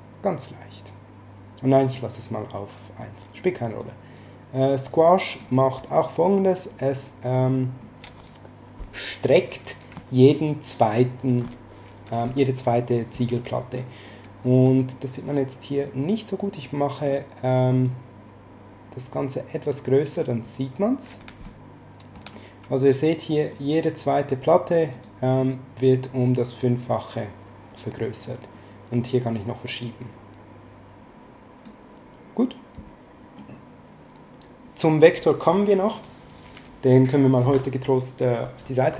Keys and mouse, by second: 3.8 click, 17.8 click, 21.4 middle click, 23.5 click, 24.9 click.